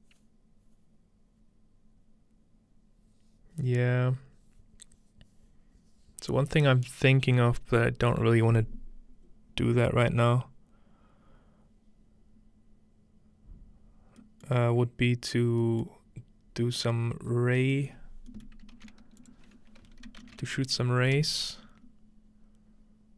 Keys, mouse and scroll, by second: 14.5-15.6 middle drag, 16.8-17.3 scroll down 2, 17.3 scroll up 2, 18.8 typing, 19.2-20.6 drag, 20.1-20.4 typing.